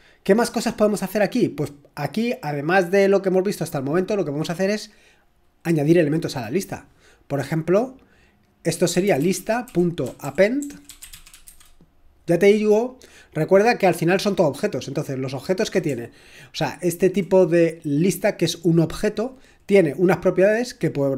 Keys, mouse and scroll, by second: 8.6-12.0 typing, 16.0 BackSpace, 16.5 BackSpace, 16.6-20.0 BackSpace.